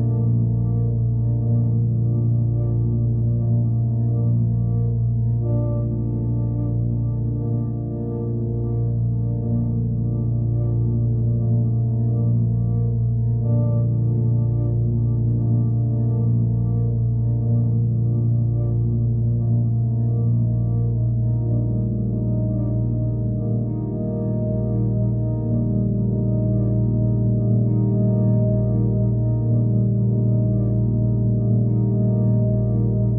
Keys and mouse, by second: 1.9-3.5 drag, 5.0-6.4 middle drag, 6.4 click, 6.9 click, 7.7 click, 8.7 click, 9.2 alt+click, 10.4 click, 10.7 click, 11.9-12.9 right drag, 12.9 click, 14.8-15.8 right drag, 15.8 click, 17.6-18.4 alt+drag, 19.2 alt+drag, 21.7 click, 22.4 click, 24.2 click, 25.2 click, 25.8 KP_0, 26.0 Return, 29.7 KP_3, 29.9 Return, 32.8 alt+click.